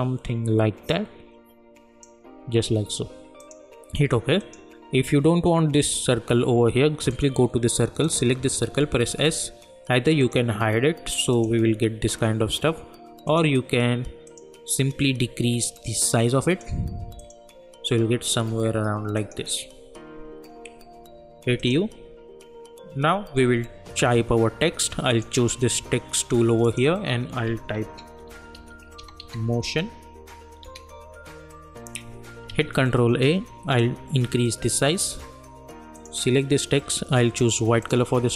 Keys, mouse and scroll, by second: 7.1 click, 8.6-9.1 typing, 10.2-17.2 drag, 20.9 u, 21.6 click, 25.1 click, 28.0-30.6 typing, 32.5 ctrl+a, 33.8-35.9 drag.